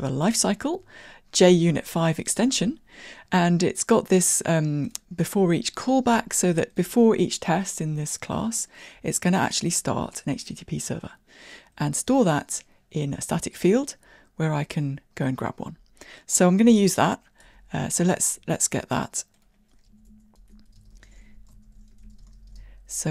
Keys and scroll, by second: 16.9 super+e, 20.0 Tab.